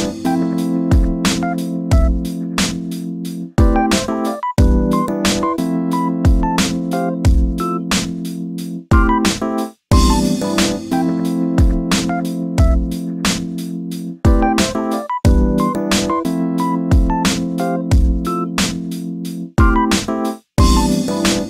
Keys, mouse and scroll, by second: 2.0 click, 2.7 shift+d, 5.4 1, 5.9 click, 6.8 g, 8.1 3, 8.2 click, 8.7 shift+d, 11.0 1, 11.4 click, 12.5 g, 13.6 3, 13.8 click, 14.5 shift+d, 15.7 1, 16.1 click, 17.1 g, 20.1 shift+middle click, 20.5 3, 21.1 click.